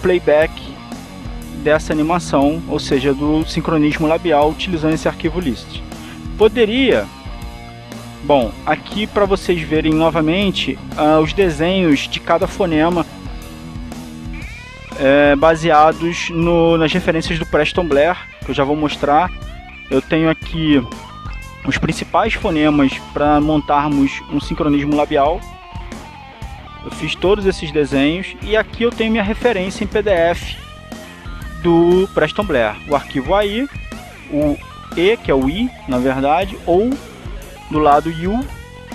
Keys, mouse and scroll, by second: 1.3 click, 2.5 click, 5.5 alt+Tab, 6.2 Tab, 6.9 Tab, 7.4 Tab, 10.1-11.2 scroll down 2, 12.7-13.4 scroll down 1, 14.7-15.4 scroll down 2, 17.0-17.6 scroll down 2, 18.5-19.2 scroll down 2, 20.3-20.9 scroll down 2, 22.0-22.6 scroll down 2, 23.4-24.6 scroll down 2, 24.7-25.3 scroll down 2, 25.8-28.3 scroll up 4, 28.3 scroll up 1, 29.1 click, 30.5-31.3 scroll down 2, 31.5-32.0 scroll down 2, 33.5-34.6 drag, 35.7 click, 36.6-37.7 scroll down 2, 38.6 click.